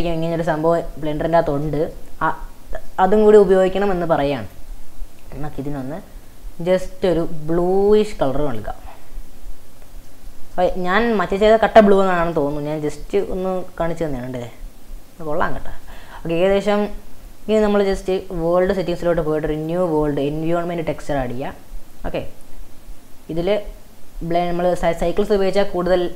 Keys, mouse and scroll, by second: 0.2-0.7 scroll down 2, 0.7 scroll down 3, 1.4-1.7 scroll down 3, 1.7-3.1 shift+middle drag, 3.1 scroll down 1, 3.3-3.6 scroll up 3, 3.6 middle click, 4.5 click, 9.3-10.1 scroll down 4, 10.1-12.1 middle drag, 12.1-12.4 scroll up 3, 12.4 middle drag, 13.0 scroll up 3, 13.3 shift+middle click, 13.8-14.6 scroll up 10, 15.8 click, 16.8-17.6 scroll down 12, 18.6 click, 19.6 click, 21.1-22.6 drag.